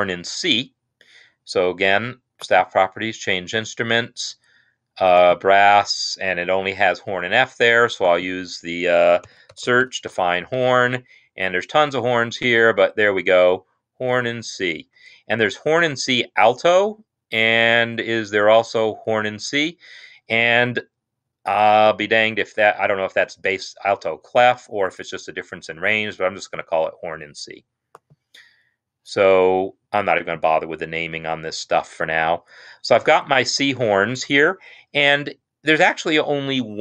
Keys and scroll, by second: 9.3-9.9 typing.